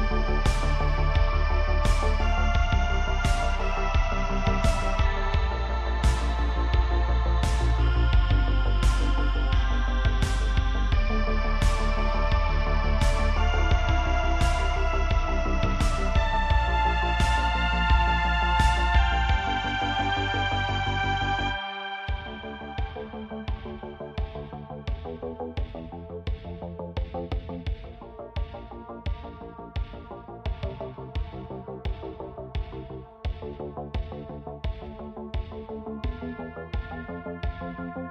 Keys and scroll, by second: 0.6 Tab, 10.6 Tab, 12.0 Tab, 16.4 Tab, 17.3 3, 21.6 Tab.